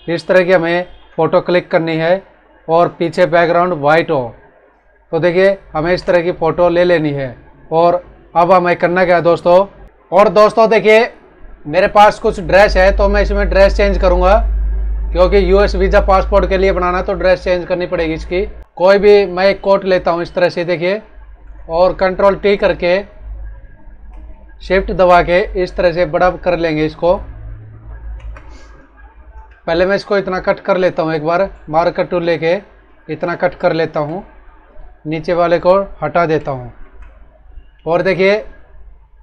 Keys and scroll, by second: 0.4 ctrl+-, 5.6 ctrl+-, 9.9 F9, 21.4 ctrl+t, 33.0 ctrl+j, 36.3 alt+l.